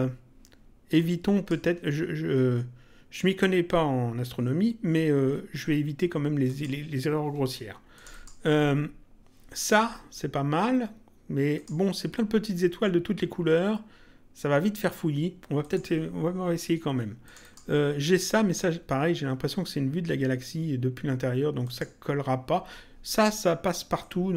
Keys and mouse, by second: 0.9 click, 6.4 click, 7.9 click, 11.5 click, 15.5 click, 17.2 click, 21.5 click, 23.9 click.